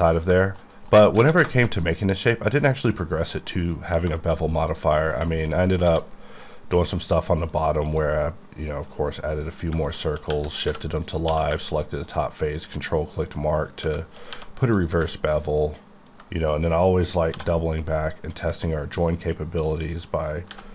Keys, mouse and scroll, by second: 0.0 middle click, 0.3-0.9 scroll down 2, 0.4 shift+middle click, 1.0 middle click, 1.2 alt+a, 1.5 shift+middle click, 1.8 middle click, 3.7 middle click, 4.2 shift+middle click, 4.4 scroll up 1, 5.1 middle click, 5.5 shift+scroll up 2, 5.9 d, 7.5 click, 8.0 click, 9.7 shift+click, 10.3 click, 10.7 3, 11.0 click, 11.3 q, 12.0 ctrl+click, 12.1 ctrl+click, 14.3 1, 14.8 click, 16.1 click, 17.3 j, 20.5 b.